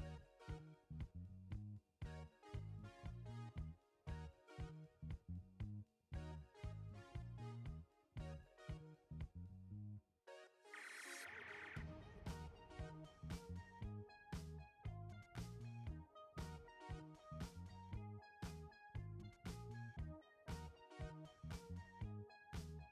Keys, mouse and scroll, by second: 2.9 ctrl+h, 4.2 alt+scroll up 1, 6.2-12.5 drag, 12.5 ctrl+0, 16.4 ctrl+click.